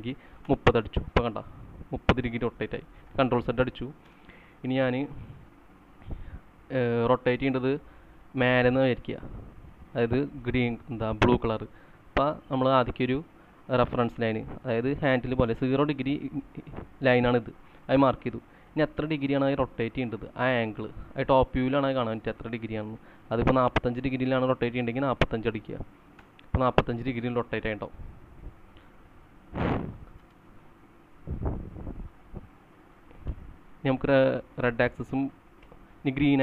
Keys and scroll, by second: 0.0-0.9 typing, 0.4 Return, 3.1 ctrl+z, 4.0-5.4 typing, 6.5 space, 7.4 space, 8.0 space, 10.9-11.7 typing, 24.5-25.5 typing, 26.1 Return, 29.1 ctrl+z, 30.1 space, 31.0 Right, 33.2 space, 35.6 Left.